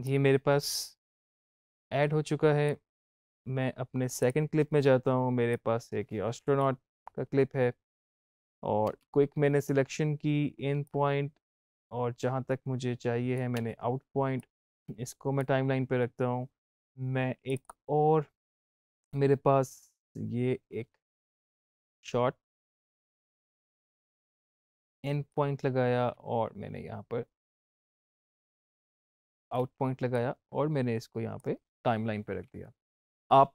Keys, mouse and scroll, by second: 8.3 space, 10.7-13.4 drag, 13.4 o, 14.3-16.7 drag, 17.3-23.2 drag, 24.0 click, 25.2-28.5 drag, 28.5 o, 29.3 o, 30.0-32.9 drag.